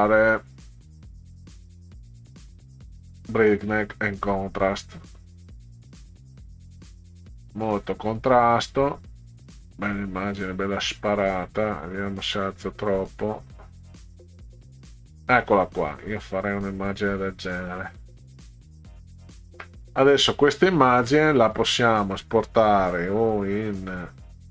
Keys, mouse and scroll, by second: 2.9 click, 4.7 click, 7.4-9.3 drag, 10.2-14.7 drag, 16.9 click, 17.8 middle click, 18.9 middle click, 21.0 click.